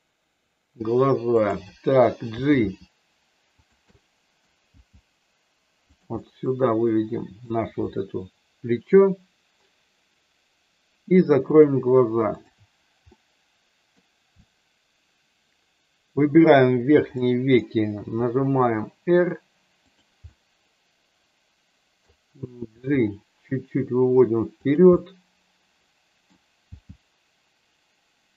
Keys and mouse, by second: 1.2 click, 2.2 g, 4.0 middle click, 4.6 g, 6.2-7.5 middle drag, 11.5 click, 12.4 shift+click, 13.1 middle click, 14.4-16.5 middle drag, 17.2 middle click, 17.8 r, 20.2-22.0 middle drag, 22.6 g, 24.6 click, 24.8-26.2 middle drag, 26.6 g.